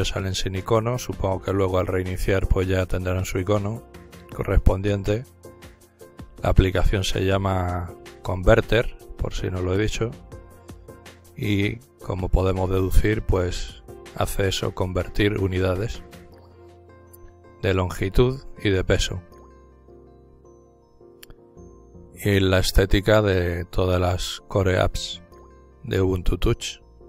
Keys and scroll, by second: 26.8-27.0 typing.